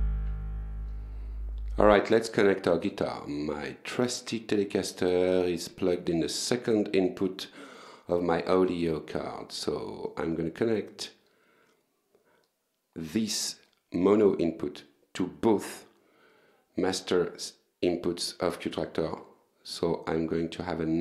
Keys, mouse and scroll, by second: 0.0 click, 2.0 click, 6.4-7.6 drag, 8.6-9.8 drag, 18.0 click.